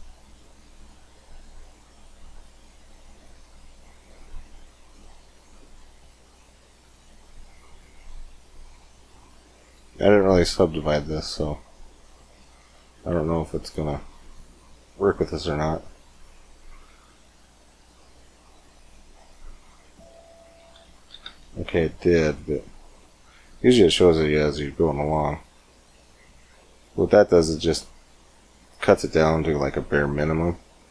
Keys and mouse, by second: 1.0-6.1 drag, 6.3-7.6 middle drag, 7.6 click, 10.2 Tab, 11.2 Tab, 12.4 Tab, 14.1 Tab, 14.9 Tab, 15.8-17.7 drag, 19.3 click, 21.1 ctrl+z, 24.5 click, 26.2 click, 26.9-28.1 drag, 27.7 Tab, 28.1-30.1 middle drag, 30.8 Tab.